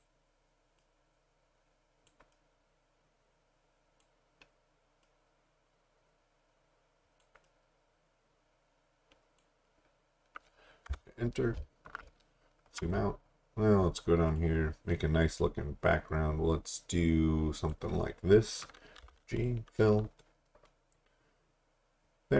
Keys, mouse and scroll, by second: 10.9 Return, 12.1 alt+scroll down 1, 13.1-14.3 scroll down 1, 14.3 click, 19.0 g, 19.4 click.